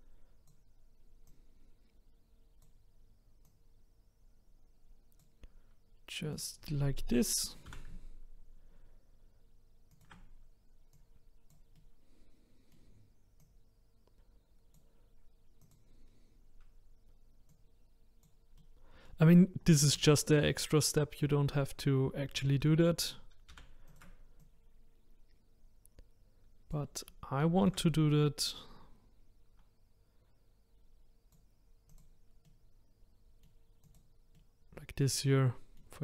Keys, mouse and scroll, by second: 3.5 click, 6.4 click, 7.7 r, 11.0 click, 11.8-13.4 middle drag, 13.4 click, 15.7 click, 16.0-17.6 scroll up 4, 17.6 click, 18.5-19.6 middle drag, 19.6-20.0 scroll down 1, 20.0-23.5 shift+middle drag, 23.5 shift+d, 24.5 click, 27.4 shift+d, 28.7 click, 32.0 click, 32.5-36.0 middle drag.